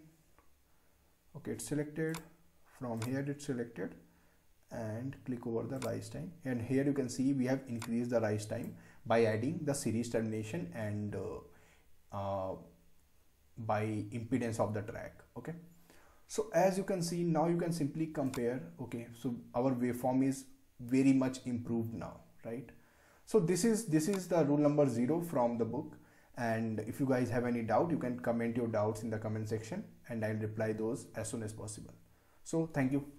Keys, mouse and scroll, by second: 2.0 click, 5.7-10.9 drag, 18.2 click, 24.1 click.